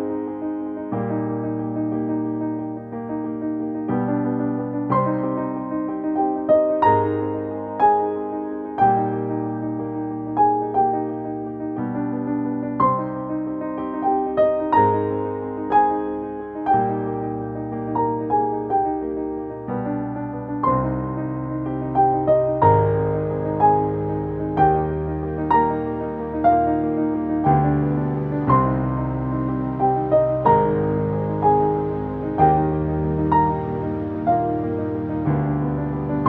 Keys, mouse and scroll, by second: 1.4-4.9 drag, 4.9 click, 8.5 click, 10.4 click, 14.2 shift+click, 14.8 shift+space, 17.6 click, 25.8 click, 33.1 space, 33.2 click, 33.5 space.